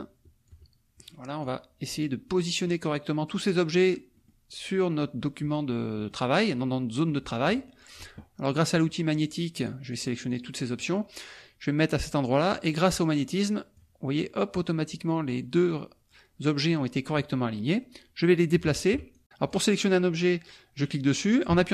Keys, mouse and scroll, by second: 1.4 click, 2.0 click, 4.1 click, 6.0 middle click, 8.7 click, 9.2 click, 9.6 click, 9.9 click, 10.3 click, 12.7-14.1 drag, 18.8 shift+click, 19.1 ctrl+shift+click, 19.2 ctrl+z.